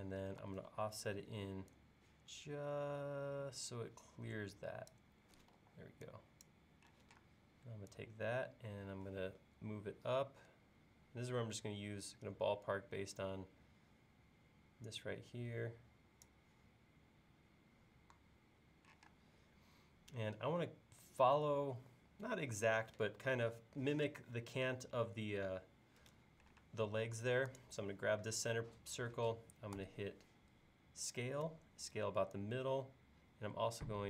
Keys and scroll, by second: 0.4 f, 5.5 e, 7.0 p, 19.0 p, 26.6 space, 29.8 s.